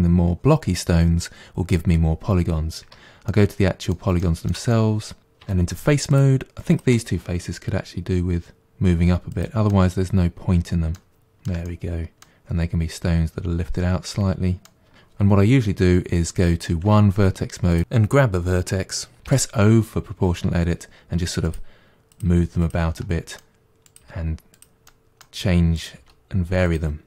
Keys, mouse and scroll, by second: 2.9 Tab, 3.3-5.5 middle drag, 5.5 3, 6.1 click, 6.7 shift+click, 7.7 g, 9.7-14.9 middle drag, 16.9 1, 17.7 click, 19.3 o, 20.5 g, 22.1 click, 22.3 g, 23.0 middle click, 23.9 click, 24.0 g, 24.9 middle click, 25.8 click, 26.0 g.